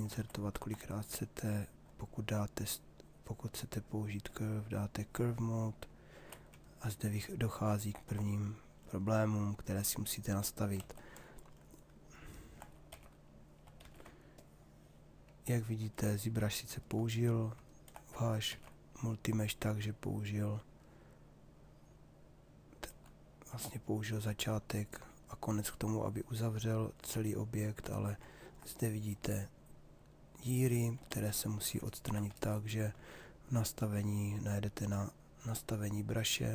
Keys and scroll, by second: 10.4 ctrl+z, 12.9 f, 13.8 shift+f, 18.0 shift+f, 30.8 ctrl+z.